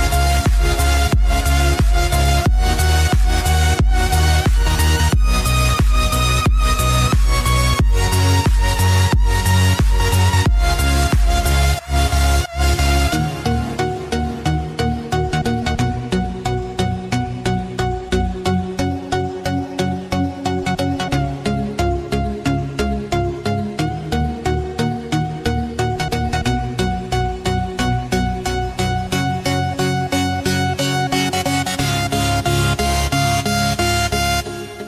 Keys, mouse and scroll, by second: 20.7 click.